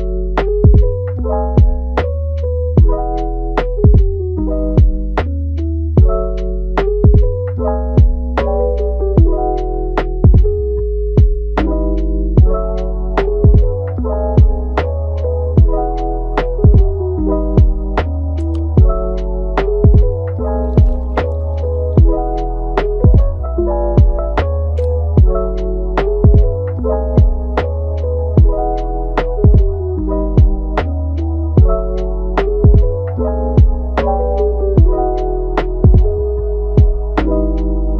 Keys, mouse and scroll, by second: 0.4 Tab, 0.9 g, 1.7 click, 2.0 g, 2.9-4.1 middle drag, 4.1-4.8 scroll up 2, 4.8-5.8 middle drag, 5.8 Tab, 6.2-7.5 middle drag, 7.5 scroll down 1, 7.8-9.1 middle drag, 9.1 Tab, 9.5 a, 9.9 scroll up 2, 10.3-11.7 middle drag, 11.7 ctrl+r, 12.5 right click, 13.2 ctrl+t, 16.1 Tab, 17.0 g, 18.5-19.2 middle drag, 19.2 scroll down 2, 19.4 middle click, 19.8 scroll up 1, 20.0-20.9 middle drag, 20.9 click, 21.3 scroll up 1, 21.5-22.2 middle drag, 22.2 shift+d, 23.6 r, 24.8 r, 25.4 Tab, 25.6 middle click, 26.0 click, 26.7 click, 27.0 g, 28.2 drag, 28.6 g, 29.3 click, 29.6 g, 30.2 middle click, 30.9 Tab, 31.3 click, 32.1 a, 33.6 ctrl+t, 34.9-35.8 middle drag, 35.8 Tab, 36.0-36.4 scroll down 2, 36.4-37.9 middle drag.